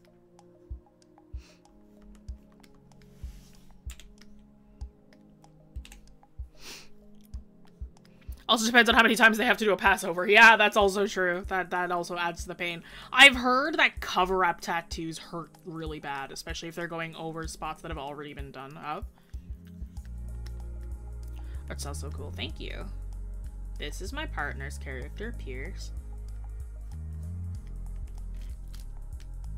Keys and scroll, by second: 2.6-3.3 scroll, 6.8 scroll.